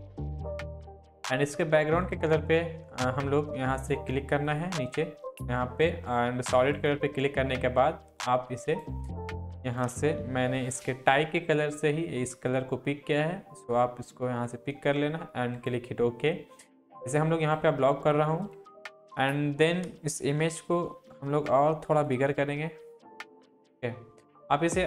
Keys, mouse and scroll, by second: 4.5 click, 6.8-8.8 drag, 10.2 ctrl+v, 15.6 click, 20.7 ctrl+t, 22.4-24.8 drag.